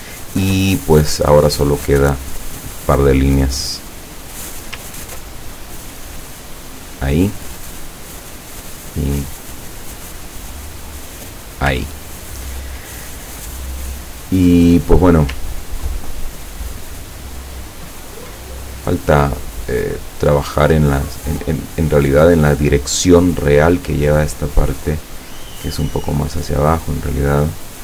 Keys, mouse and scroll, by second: 2.0 click, 4.4 click, 6.6 click, 9.1 click, 11.1 click, 11.9-12.6 ctrl+scroll down 2, 14.3 scroll up 2, 14.9 scroll down 2, 16.3 ctrl+scroll up 2, 17.1-17.5 ctrl+scroll up 2, 17.7 ctrl+scroll down 2, 19.8 click, 21.9 click, 23.2 click, 24.8-27.8 drag.